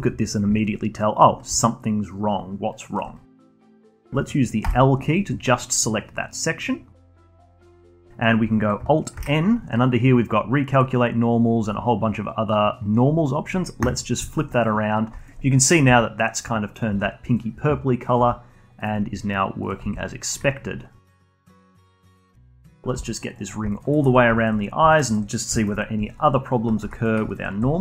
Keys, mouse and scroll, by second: 1.5-3.1 alt+drag, 3.1 scroll up 1, 3.3-4.6 alt+drag, 4.6 l, 5.5-6.5 scroll down 6, 6.5-7.3 scroll up 11, 7.3-8.0 alt+middle drag, 8.0-8.3 scroll down 1, 9.1 alt+n, 14.2 alt+middle drag, 14.5 click, 14.9 scroll down 1, 15.1-15.6 alt+drag, 15.8 g, 16.7 click, 16.8 g, 18.0 click, 18.1 g, 19.6 click, 19.8 g, 21.0 click, 21.1 g, 21.9 click, 22.1 g, 22.9 g, 23.4 scroll down 1, 23.7 alt+drag, 23.9-24.3 alt+middle drag, 24.3 alt+click, 24.6 scroll up 2, 24.9 alt+middle click, 25.0-25.5 alt+drag, 25.5-26.1 alt+middle drag, 26.1 alt+click, 26.4-26.8 scroll down 1, 26.8 2, 26.9 click, 27.2 alt+click.